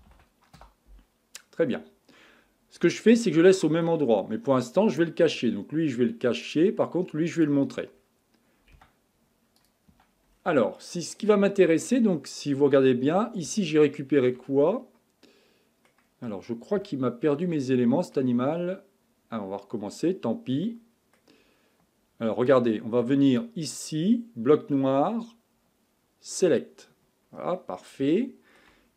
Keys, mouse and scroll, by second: 2.8-5.9 middle drag, 6.4 click, 7.4 click, 7.9 scroll up 5, 8.7 Tab, 9.6 click, 9.9 Tab, 10.3-10.8 scroll down 4, 10.8-12.0 middle drag, 12.0-13.6 scroll up 2, 13.6-19.3 shift+middle drag, 19.3-20.1 scroll up 3, 20.1 scroll down 1, 20.7-23.3 middle drag, 23.3 click, 26.3 click, 27.2-27.8 scroll up 3, 27.8 scroll down 1, 28.1-28.9 shift+middle drag.